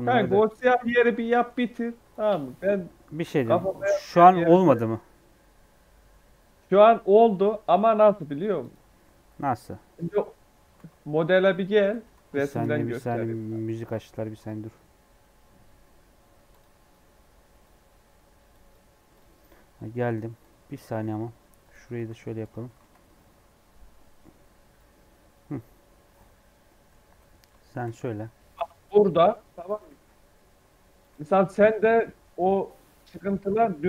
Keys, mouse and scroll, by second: 0.0-1.8 typing, 0.4 click, 1.0 scroll down 1, 1.2 middle click, 2.4 Tab, 2.6 scroll down 3, 2.8 middle click, 3.4-6.4 middle drag, 7.3 Tab, 7.5 scroll up 2, 7.8 3, 8.1 middle click, 8.5-9.7 drag, 9.7 KP_3, 9.8 KP_3, 10.7 alt+z, 10.9 scroll up 2, 19.6-19.9 scroll down 4, 19.9 scroll up 1, 20.3 click, 20.8 e, 22.5 Tab, 22.9 scroll down 2, 23.1-26.4 middle drag, 26.4 scroll up 1, 26.6 middle click, 26.9 Tab, 27.2 shift+middle click, 27.9-28.3 scroll up 2, 28.4 scroll down 1, 28.5 middle click, 29.0 i, 29.8 e, 32.5 Tab, 32.7-33.1 scroll down 1, 33.1 scroll up 1, 33.7-33.8 scroll up 1.